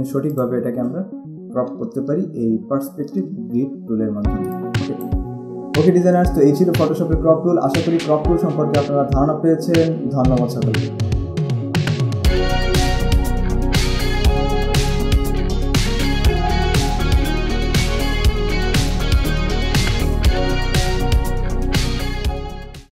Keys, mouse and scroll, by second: 0.6 ctrl+click, 2.7 ctrl+shift+z, 3.5 alt+scroll down 1, 4.5 space, 4.7 click, 5.5 alt+scroll down 1.